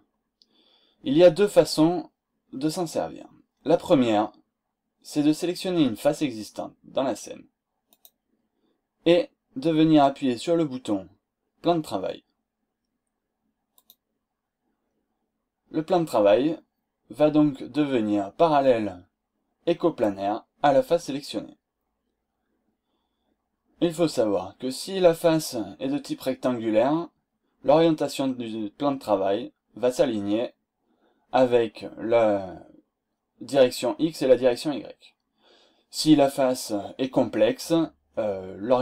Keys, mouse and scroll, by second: 8.0 click, 13.7 click, 14.8-15.2 scroll down 1, 15.8-16.1 scroll up 1, 16.4 scroll down 1, 17.6-18.0 scroll up 1, 18.3-18.6 scroll up 2, 19.7-20.2 scroll down 4, 20.2 scroll up 2, 22.1 scroll down 2, 22.3-22.8 scroll up 4, 24.6-25.0 scroll up 2, 25.2 scroll down 2, 25.8 scroll down 2, 26.1 middle click, 26.4-27.4 scroll up 4, 27.6-27.9 scroll down 2, 28.2-28.5 scroll up 2, 30.3 scroll down 2, 30.8 scroll up 2, 34.5-34.8 scroll down 2, 35.0 scroll up 2, 37.7-38.1 scroll down 2, 38.3-38.7 scroll up 2.